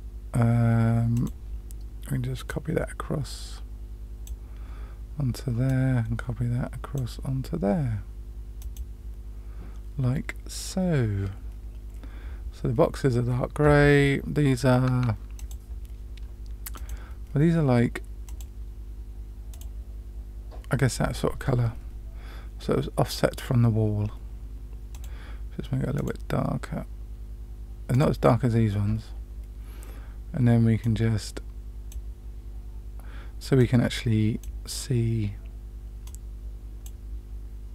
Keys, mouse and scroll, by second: 1.1 click, 2.4-4.2 drag, 5.6-6.9 drag, 8.6 click, 15.3 click, 16.7 click, 18.2 click, 24.9 click, 30.8-31.8 drag, 33.5-34.4 drag, 36.0 click.